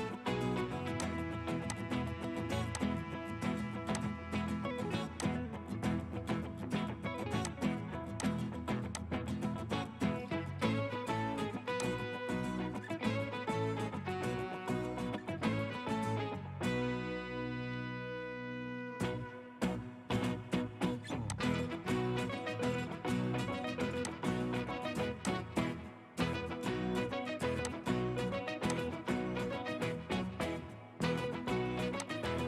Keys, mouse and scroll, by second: 2.3 Escape, 26.1-27.7 scroll up 1, 29.7-30.1 scroll up 1, 30.1-30.9 scroll down 1, 30.9-32.3 scroll up 1.